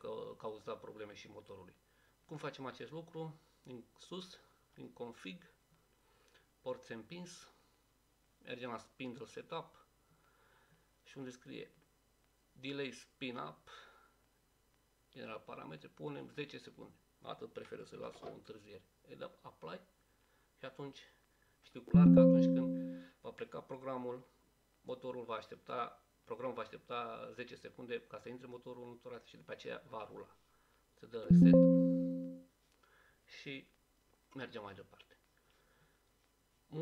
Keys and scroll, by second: 18.1 0.